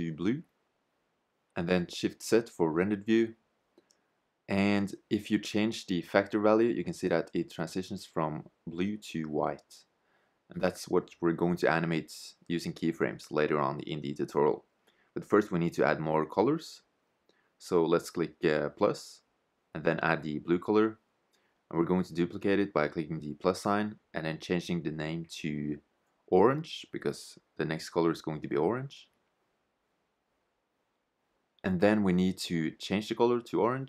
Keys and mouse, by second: 0.6 shift+z, 4.6 shift+z, 5.9 shift+z, 14.2 shift+z, 18.4-21.2 drag, 22.1-25.1 drag, 32.4-33.8 drag.